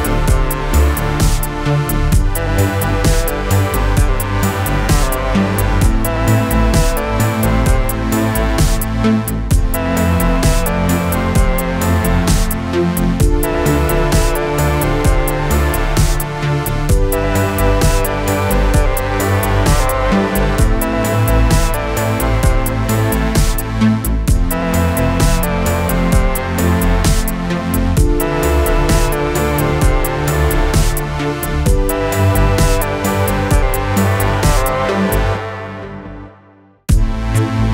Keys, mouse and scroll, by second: 0.3 ctrl+v, 1.8-4.5 click, 6.4-7.3 click, 9.4 space, 16.7 space.